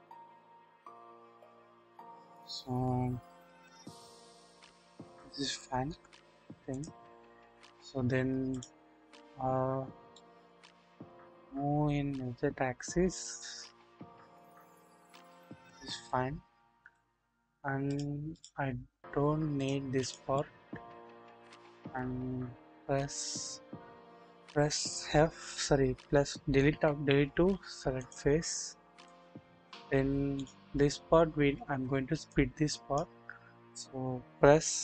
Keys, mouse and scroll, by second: 5.8 KP_1, 7.4 KP_1, 10.1-10.5 shift+middle drag, 11.0-15.3 middle drag, 16.0 shift+middle click, 17.2-17.9 scroll down 1, 18.0 double click, 19.6 click, 21.2-21.7 scroll up 1, 21.7 Delete, 26.7 Delete, 29.0 click, 30.3 click, 32.3 click, 33.5-34.1 scroll up 1, 34.1-34.8 scroll down 1.